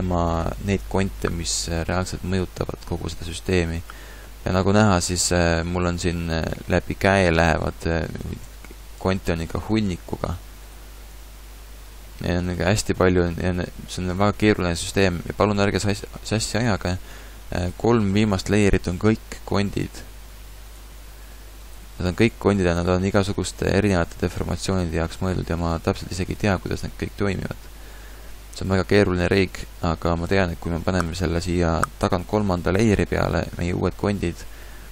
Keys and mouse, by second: 1.6 a, 2.6-3.6 middle drag, 8.4 Tab, 9.0 Tab, 12.9 a.